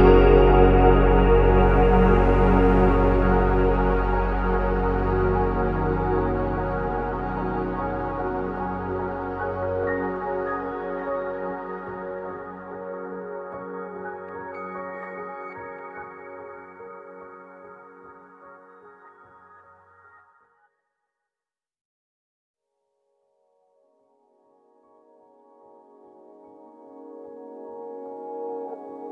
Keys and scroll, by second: 3.1-4.0 typing, 4.8 ctrl+c, 4.8 ctrl+v, 7.0 ctrl+z, 10.8 ctrl+c, 12.7 typing, 12.8 Return, 14.1 Escape, 14.3 Escape, 14.7 ctrl+c, 17.6 Escape, 18.5 typing, 18.6 Return, 22.7 BackSpace, 22.9 BackSpace, 24.1 BackSpace.